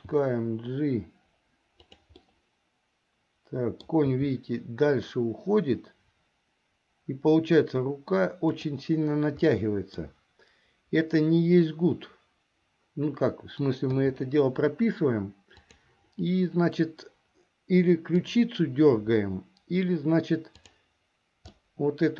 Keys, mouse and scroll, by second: 0.1 g, 2.4-4.1 middle drag, 4.2 g, 9.6 middle click, 14.1 i, 15.7 click, 18.2 click, 20.6 click, 21.6-22.1 middle drag.